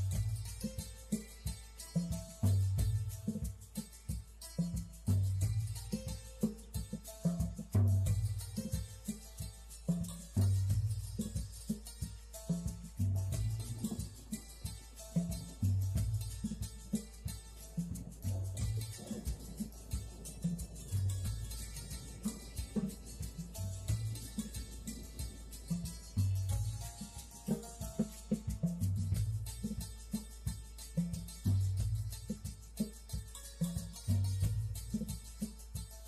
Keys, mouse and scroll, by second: 1.6 scroll down 2, 5.0 click, 5.7 click, 7.1 click, 7.6 middle click, 12.3 click, 12.7 click, 17.2 drag, 18.1 click, 19.0 click, 20.2 click, 20.8 click, 21.4 click, 22.7 click, 24.0 scroll up 2, 24.2 click, 25.3 click, 27.5 click, 29.5 scroll down 1, 30.4 right click, 32.2 click, 32.8 click, 33.3 click.